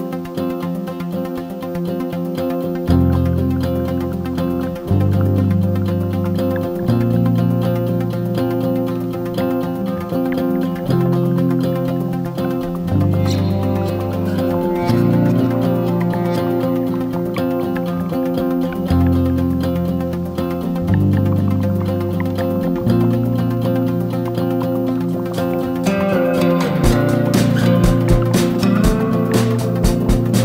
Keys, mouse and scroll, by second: 2.0 click, 2.2 click, 2.8-3.4 drag, 3.6-5.7 drag, 6.1 click, 6.3 Tab, 6.5 scroll down 3, 6.6 click, 8.3 drag, 8.5 scroll up 1, 8.6 Tab, 9.0 3, 9.2 click, 9.4 alt+click, 9.7 g, 10.3 Tab, 10.4 g, 11.7 drag, 11.9 s, 12.8 click, 14.4-14.8 shift+middle drag, 14.8-15.6 scroll up 2, 15.6 shift+right click, 15.7 shift+a, 17.0 s, 19.1 Tab, 19.3 e, 19.9 Tab, 20.1 g, 21.6-24.8 drag, 25.0 scroll up 1, 25.1 Tab, 26.0 ctrl+r, 27.0 3, 27.1 click, 27.5 g, 28.7 2, 29.0 alt+shift+click, 29.2 shift+click, 29.4 alt+click, 29.8 click, 30.0 click, 30.2 alt+click.